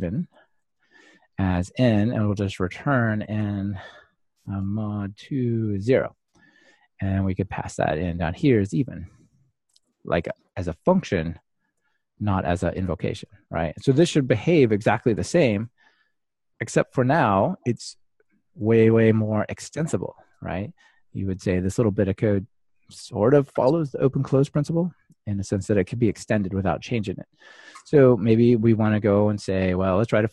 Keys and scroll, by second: 9.4 Return, 11.7 Return, 11.7 ctrl+alt+shift+Left, 15.6 ctrl+r, 30.2 super+d.